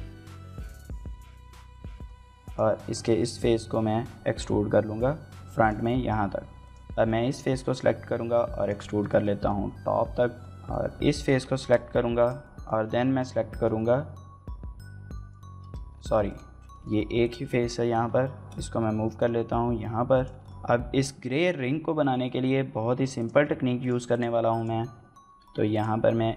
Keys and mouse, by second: 0.5 right click, 0.7-1.8 typing, 1.5 click, 1.6 middle click, 2.1 click, 2.1 middle click, 2.6 middle click, 3.1 KP_1, 3.8 e, 5.4 click, 5.7 middle click, 6.4 click, 6.7 middle click, 8.4 click, 8.8 shift+middle click, 9.0 middle click, 9.8 middle click, 10.6 z, 10.7 click, 10.8 middle click, 11.4 middle click, 11.7 middle click, 11.7 a, 12.2 click, 12.3 middle click, 12.7 l, 12.9 middle click, 13.3 u, 13.6 y, 14.1 click, 14.2 middle click, 14.9 click, 15.0 middle click, 15.2 middle click, 15.5 shift+middle click, 15.8 middle click, 16.3 shift+middle click, 17.0 middle click, 17.3 g, 17.3 x, 17.5 right click, 17.7 shift+middle click, 17.8 z, 18.1 middle click, 18.3 g, 19.2 click, 19.3 Tab, 19.6 middle drag, 19.9 middle click, 20.2 shift+middle click, 20.3 middle click, 21.8 shift+middle click, 22.0 middle drag, 23.0 click, 23.6 drag, 24.3 click, 24.8 Tab, 25.2 Tab, 25.5-26.3 drag.